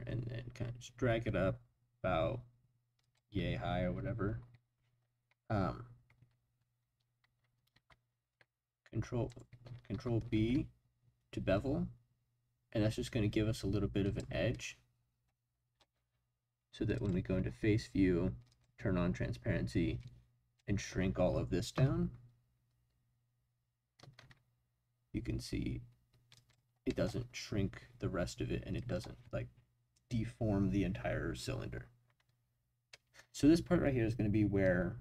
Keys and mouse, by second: 3.0 click, 7.7 ctrl+shift+b, 9.3 click, 9.9 ctrl+b, 14.0 click, 17.0 click, 18.5 click, 20.0-21.7 drag, 21.7 s, 24.2 shift+z, 26.3 click, 26.9 middle click, 32.9-34.1 middle drag.